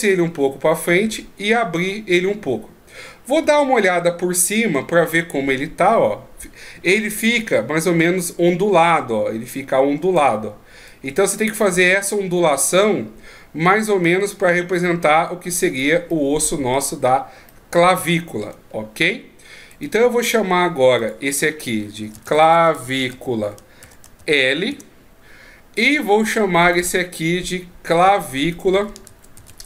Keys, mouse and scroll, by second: 3.4 KP_7, 7.9 d, 8.2 click, 10.2 d, 10.6 d, 10.9 right click, 15.8 d, 16.1 middle click, 17.5 middle click, 18.7 shift+scroll down 3, 19.7 right click, 21.0 click, 26.6 right click, 28.5 click.